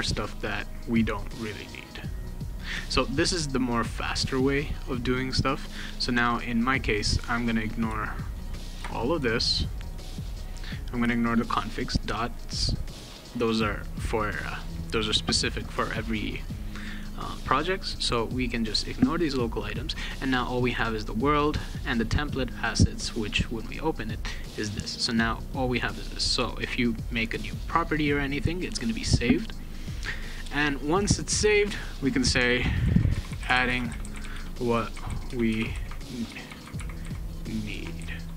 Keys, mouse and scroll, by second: 1.1 click, 2.5 click, 7.4 click, 8.2 shift+click, 9.4 ctrl+click, 9.8 ctrl+click, 10.2 ctrl+click, 11.1 ctrl+click, 11.7 ctrl+click, 12.2 ctrl+click, 12.7 ctrl+click, 17.7 right click, 19.0 click, 20.9 click, 21.4 click, 21.8 click, 23.5 click, 24.3 click, 24.8 click, 25.4 click, 29.9 click, 31.5 click, 32.5-38.3 typing.